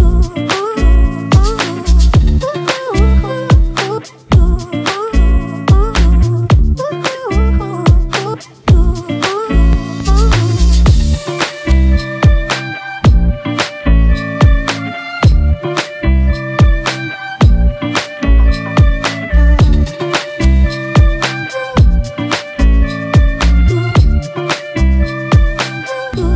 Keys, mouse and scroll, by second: 0.4 [, 1.4-1.8 [, 3.0 typing, 14.3 alt+right click, 15.1-17.4 scroll down 1.